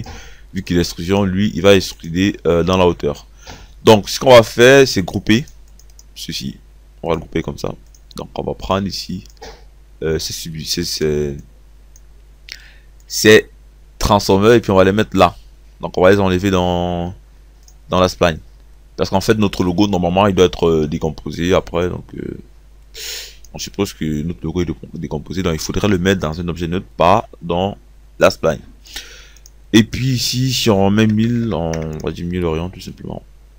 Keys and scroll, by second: 30.9 KP_1, 31.4 KP_0.